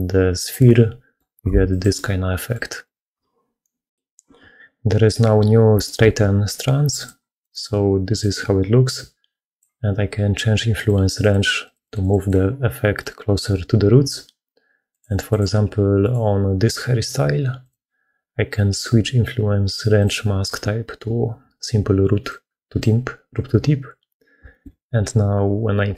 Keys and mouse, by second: 0.6 click, 1.2 g, 1.4 z, 1.7 click, 2.6 click, 6.9 click, 7.2 click, 8.0-9.5 drag, 10.6 click, 11.0 click, 11.5 click, 12.6 middle click, 14.8 click, 15.3-22.9 drag, 24.4 shift+middle click.